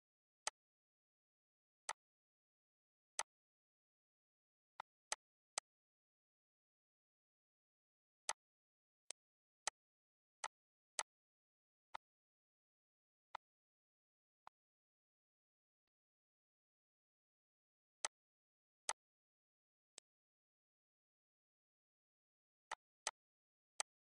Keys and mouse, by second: 0.2 click, 1.6 click, 2.9 click, 4.5 click, 8.0 click, 8.8 click, 10.1 click, 11.7 click, 13.1 click, 14.2 click, 15.7 click, 17.8 click, 18.7 click.